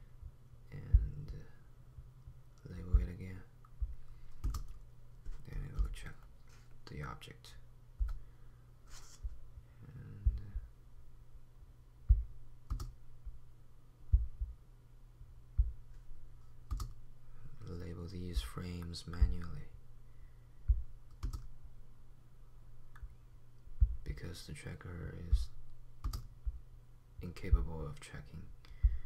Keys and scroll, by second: 6.0 p, 8.0 p, 8.4 p.